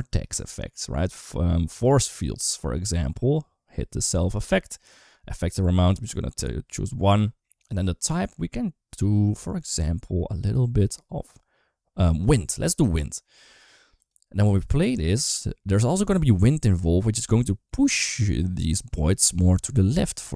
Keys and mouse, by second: 1.5 click, 4.2 click, 5.8 click, 7.6-12.2 drag, 14.3 space.